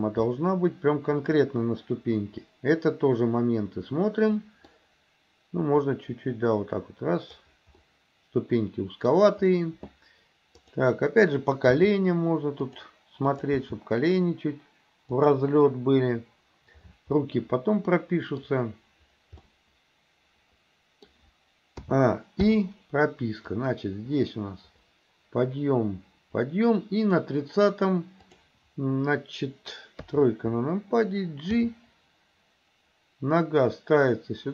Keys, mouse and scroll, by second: 0.3-4.7 middle drag, 4.7 scroll down 1, 6.0-7.5 drag, 7.9 scroll up 1, 8.0-9.2 middle drag, 11.8 g, 13.3 click, 13.7 g, 17.2-18.4 middle drag, 19.4-21.1 middle drag, 21.9 a, 22.5 i, 23.6-27.3 drag, 28.3 click, 30.1 KP_3, 31.5 g.